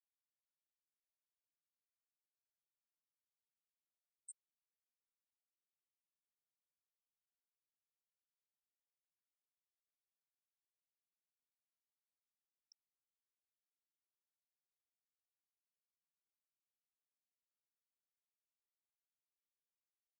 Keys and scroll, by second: 12.6 ctrl+c, 14.2 ctrl+c.